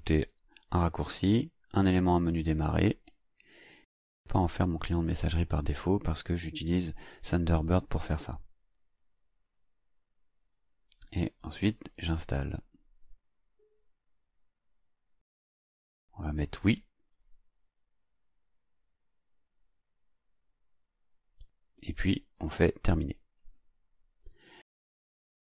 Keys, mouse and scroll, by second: 4.2 click, 9.5 click, 11.7 click, 17.1 click, 23.4 click.